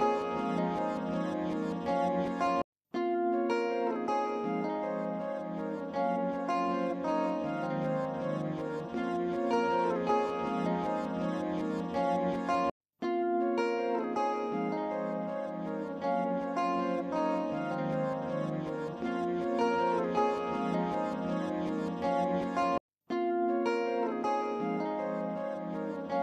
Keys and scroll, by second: 0.0 alt+z.